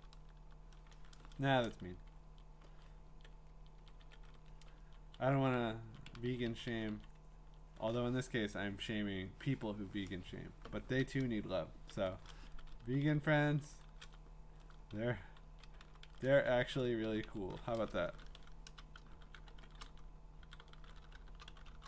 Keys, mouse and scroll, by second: 0.2 BackSpace, 0.4 BackSpace, 1.8 Up, 2.2 Down, 3.0 Right, 3.5 Right, 3.8 Right, 4.8 Down, 5.6 Up, 5.8 Down, 6.0 Down, 6.2 Down, 6.5 Down, 6.7 Down, 6.9 Down, 7.4 Down, 11.0 BackSpace, 12.8 Down, 13.0 Down, 13.2 Down, 13.4 Down, 14.0 Down, 15.4 Down, 15.8 Up, 16.0 Up, 16.2 Up, 16.6 Down, 16.8 Up, 17.0 ctrl+shift+Left, 17.2 ctrl+shift+Left, 18.1-21.8 typing.